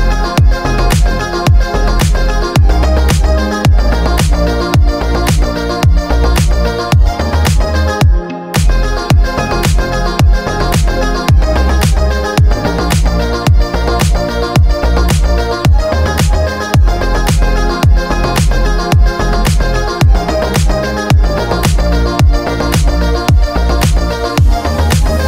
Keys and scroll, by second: 0.0-0.3 typing, 0.7 Return, 2.3-3.9 typing, 4.9-6.6 typing, 10.4 ctrl+k, 13.9 c.